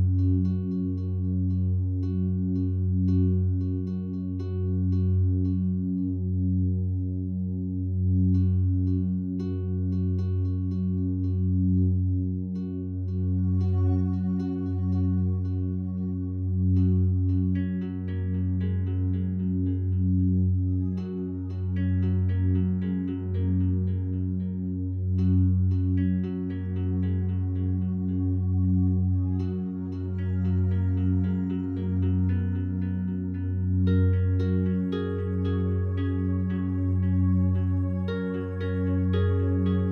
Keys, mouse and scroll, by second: 0.4 b, 0.8-2.3 drag, 2.0 b, 3.5-4.8 drag, 5.1-8.0 ctrl+alt+drag, 8.6 ctrl+alt+shift+click, 9.1-10.2 alt+shift+drag, 10.5 ctrl+alt+click, 10.9 ctrl+alt+shift+click, 11.4 alt+shift+click, 12.3 ctrl+alt+click, 15.0 click, 16.1 Tab, 18.1 click, 19.2 click, 20.1 click, 20.8-21.9 typing, 22.4 click, 23.9 click, 25.7 ctrl+alt+click, 27.4 /, 28.5 ctrl+s, 29.0-30.9 ctrl+alt+drag, 31.0-32.7 drag, 32.8 click, 33.4 click, 34.3-35.5 drag, 35.7-36.3 drag, 36.6-37.5 ctrl+alt+drag, 37.2 g.